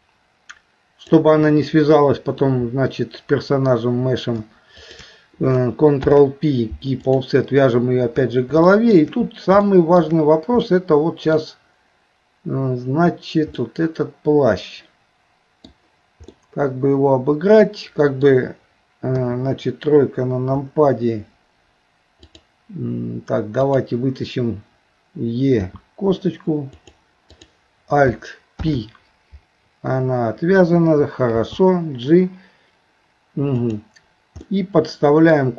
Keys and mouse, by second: 0.1-1.2 drag, 4.9 shift+click, 6.0 ctrl+p, 8.6 shift+middle click, 9.6 shift+middle click, 10.6 middle click, 13.6-15.7 middle drag, 16.4-18.3 middle drag, 19.2 KP_3, 22.3 click, 23.6 click, 25.6 e, 27.3 click, 28.6 alt+p, 31.3 g, 34.5 middle click.